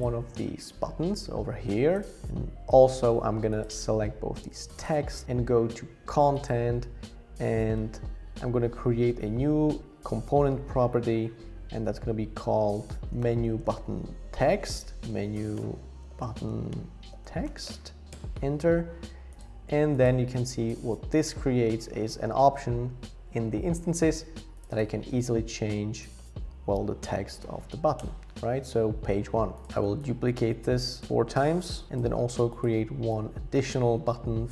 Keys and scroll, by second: 12.8-14.3 typing, 26.1 shift+Page_Up, 26.2-27.8 typing, 28.0 Return.